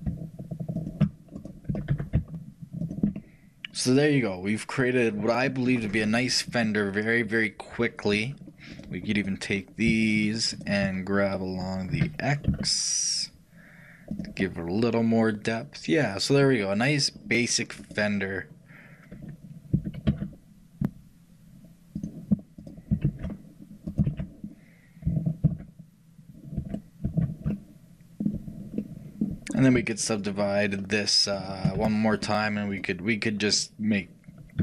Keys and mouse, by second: 9.9-13.5 shift+drag, 12.0 shift+g, 14.5-16.5 middle drag, 23.0-25.8 shift+drag, 23.2 shift+r, 24.2 shift+r, 25.5 ctrl+z, 30.5-34.6 shift+right drag, 31.8 shift+w.